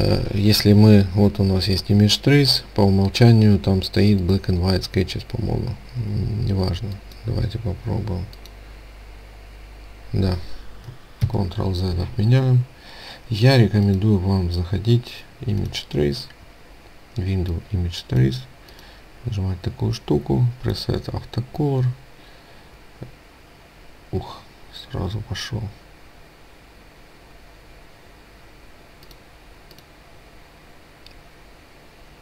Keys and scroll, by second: 11.2 ctrl+z.